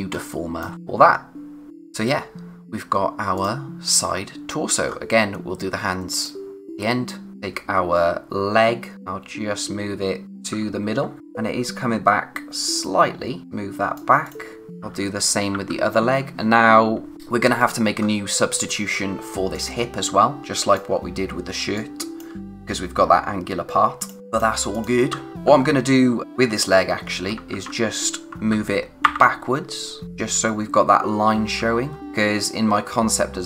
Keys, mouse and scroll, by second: 0.1 space, 0.3 click, 0.7-1.4 scroll up 1, 1.4 click, 1.7 scroll down 1, 3.3 click, 4.8-5.5 scroll up 1, 6.1 click, 7.3-7.6 typing, 8.9 click, 10.2 Right, 14.8-16.0 typing, 17.5 typing, 18.0-19.5 scroll up 1, 19.5 click, 20.3 scroll down 1, 20.4 click, 20.7 space, 21.7 click, 22.1 space, 22.4-22.9 scroll up 1, 24.0 click, 24.3 space, 24.7 click, 25.3 typing, 26.7-27.5 typing, 30.0-31.1 scroll up 1, 31.9 scroll down 1, 31.9 space, 32.0-33.4 scroll up 1.